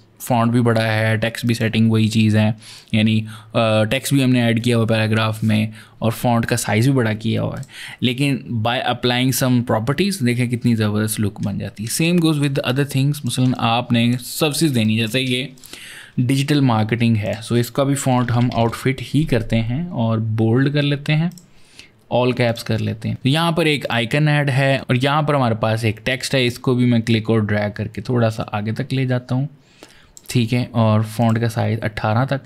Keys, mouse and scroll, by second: 1.3 click, 6.3 click, 7.4 click, 11.7 space, 11.9 click, 12.5 ctrl+click, 14.1 ctrl+click, 15.4 click, 17.1 click, 18.0-18.5 typing, 21.1 click, 22.3 click, 23.1 click, 23.7 click, 24.6 click, 26.3 click, 31.0 click.